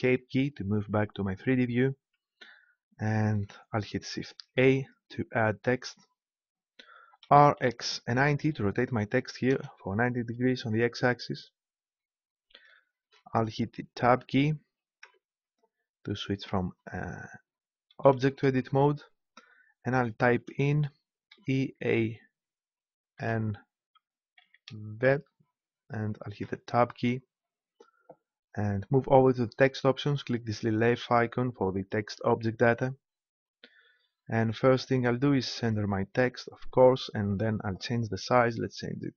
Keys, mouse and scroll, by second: 4.5 shift+a, 7.2 r, 15.0 Tab, 17.9 BackSpace, 18.1 BackSpace, 18.6 BackSpace, 20.3 BackSpace, 21.3 shift+e, 21.7 shift+a, 23.1 shift+n, 24.4 shift+v, 26.4 Tab, 30.8-32.6 drag, 33.7-35.4 drag, 35.6-37.3 drag.